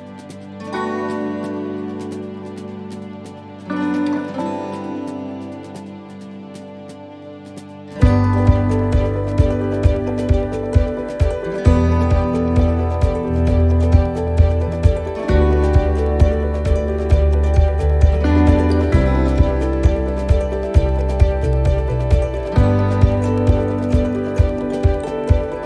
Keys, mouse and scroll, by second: 1.5 middle click, 2.7 click, 3.0-3.4 scroll up 1, 3.9 right click, 4.5 shift+right click, 5.7 shift+right click, 6.0 right click, 6.9-14.6 shift+right click, 16.4 shift+right click, 16.4 shift+middle click, 17.6 shift+right click, 18.5 shift+right click, 22.9 shift+right click, 22.9 shift+middle click, 23.5 middle click, 23.8 scroll down 1, 24.2 shift+middle click.